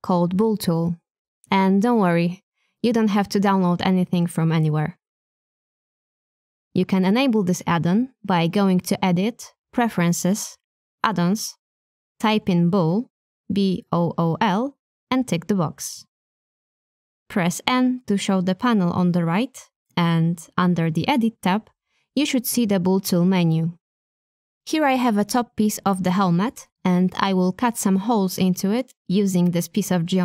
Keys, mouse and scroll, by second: 2.1 click, 3.7 shift+click, 6.1 h, 6.8-8.0 middle drag, 9.3-12.0 drag, 26.2 click, 28.9 g.